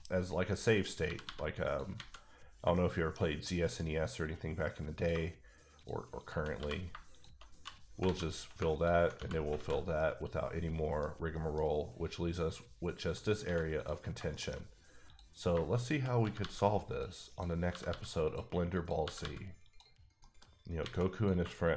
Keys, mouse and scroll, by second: 0.1-0.8 scroll up 2, 0.8 click, 1.0 g, 1.2 g, 1.6 click, 1.9 alt+a, 2.2-2.7 scroll down 2, 2.7 shift+middle click, 3.7 middle click, 4.9 click, 5.1 shift+click, 6.1 shift+click, 6.2 shift+double click, 6.9-7.6 typing, 7.1 shift+click, 8.0 alt+a, 8.7 alt+click, 9.4 f, 9.5 a, 9.9 middle click, 11.3 middle click, 11.6-13.0 scroll up 2, 13.0 click, 13.4 x, 13.7 click, 14.1 scroll down 2, 14.3 shift+middle click, 15.0 click, 16.2 g, 16.4 g, 16.9 click, 17.3 click, 17.7 g, 17.9 g, 18.2 click, 18.7 click, 19.0 g, 19.2 g, 19.6 click, 19.9 scroll down 1, 20.2 middle click, 20.4-20.8 scroll up 1, 20.8 alt+a, 21.1 click.